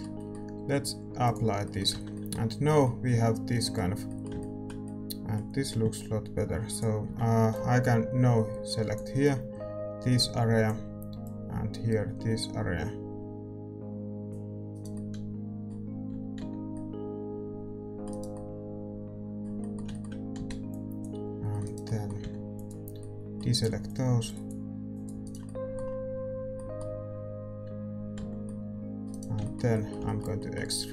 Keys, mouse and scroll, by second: 0.1 ctrl+shift+z, 0.1 Tab, 1.3-5.1 drag, 2.8 Tab, 6.6-14.9 drag, 8.3 c, 14.9-16.7 right drag, 16.7 c, 18.3-23.8 middle drag, 22.5 c, 25.4-28.4 right drag, 28.4 c, 29.4-30.9 middle drag.